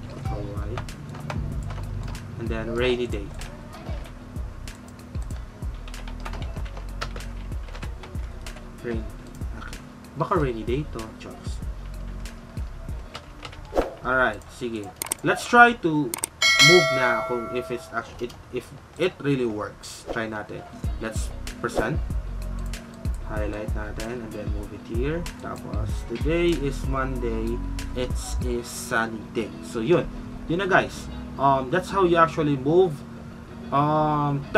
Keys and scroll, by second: 6.0-8.8 typing.